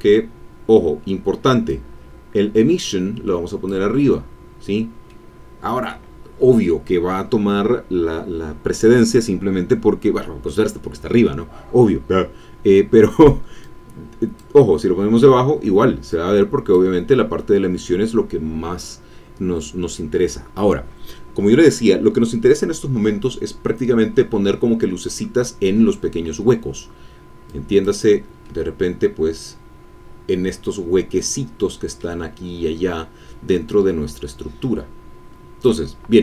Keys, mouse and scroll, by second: 1.7-3.8 drag, 5.1-13.0 middle drag, 13.6 click, 16.1 click, 27.4 click, 28.4 middle click, 29.1-29.6 scroll up 1, 29.6-31.2 scroll up 1, 31.2 middle click, 32.0 scroll up 1, 32.1 scroll down 1, 32.7 scroll down 1, 34.6-35.8 drag.